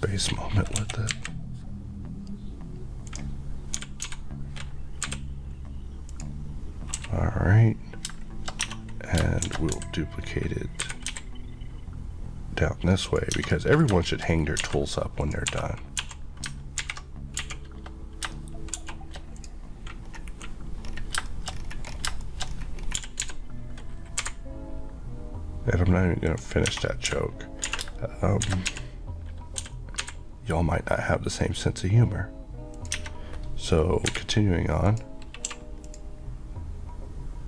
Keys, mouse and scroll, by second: 0.8 KP_1, 1.1 KP_3, 3.1 click, 3.8 g, 5.1 typing, 6.1 click, 6.9 scroll, 8.1 shift+q, 8.7 Tab, 9.2 shift+Tab, 9.5 shift+d, 13.1 click, 13.4 Tab, 13.5 middle click, 14.3 scroll up 1, 14.6 alt+a, 15.3 click, 15.5-17.4 typing, 16.9 alt+h, 19.2 shift+3, 19.4 click, 20.1 scroll up 1, 20.3 KP_Decimal, 20.9-21.2 scroll up 1, 21.3 middle click, 21.6 scroll up 1, 22.3 middle click, 22.5-22.8 shift+scroll up 2, 23.0 g, 24.2 typing, 26.3 click, 26.7 Tab, 27.1-28.5 typing, 32.8 click, 33.0 Tab, 34.1 h, 34.9 click, 35.5 q, 35.9 click.